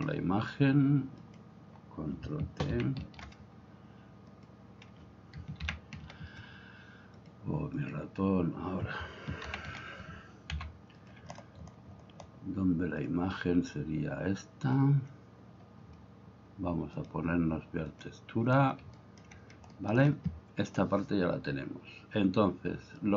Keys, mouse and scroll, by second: 2.7 ctrl+t, 5.7 ctrl+t, 9.5 ctrl+t, 11.4 click, 19.2 shift+click, 19.8 shift+click.